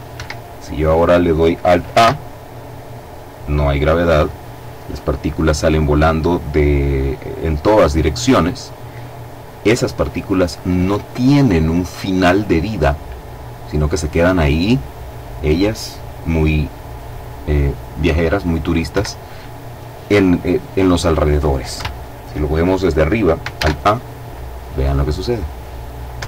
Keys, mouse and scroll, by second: 1.6 alt+a, 18.5 Escape, 21.4 KP_7, 23.2 alt+a, 25.7 Escape.